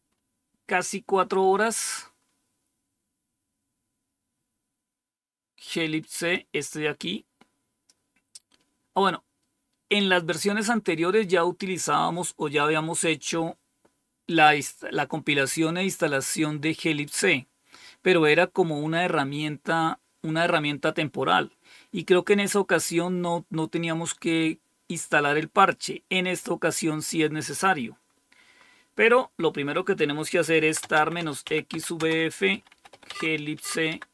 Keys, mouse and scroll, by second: 0.0-1.4 scroll up 2, 1.7-2.2 scroll up 2, 4.2-5.1 scroll up 3, 6.2-7.8 drag, 27.3 click, 28.5-29.4 scroll down 5, 30.2-33.8 typing.